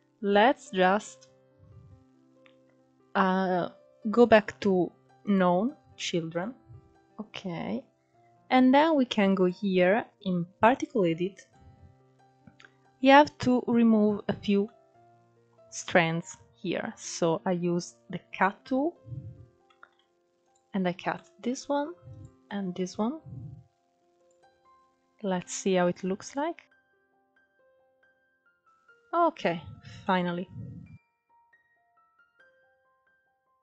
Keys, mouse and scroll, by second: 0.3-1.0 scroll down 3, 1.0-4.1 scroll down 1, 4.3 click, 5.2 scroll down 4, 5.4-6.9 middle drag, 6.9-7.9 scroll up 1, 7.9-8.3 scroll up 1, 8.3-10.5 drag, 10.5-17.7 middle drag, 17.7 click, 18.3-18.7 scroll up 2, 18.7-19.4 middle drag, 19.4-20.1 drag, 20.1-21.1 middle drag, 21.1-23.2 drag, 24.8 click, 25.7 scroll down 3, 25.8-26.9 middle drag, 26.9 scroll down 3, 27.1-28.7 middle drag, 28.7 scroll up 1, 29.0 shift+middle click, 29.4-30.0 scroll up 1, 30.0 click, 30.7-31.6 middle drag, 31.6 scroll up 1, 32.0 click, 32.3 middle click, 32.4 scroll up 1, 32.5 middle click, 32.7 click, 32.8-33.6 middle drag.